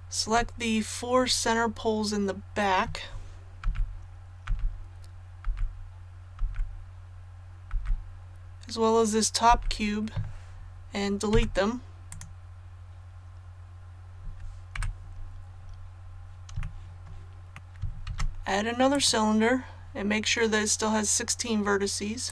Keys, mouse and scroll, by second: 1.4-1.7 scroll up 1, 3.6-6.3 typing, 7.7 typing, 11.3 x, 12.1 click, 14.7 KP_1, 15.5 scroll down 1, 16.6 shift+middle click, 17.5 shift+middle click, 17.5 ctrl+z, 18.0 shift+a, 18.9 click.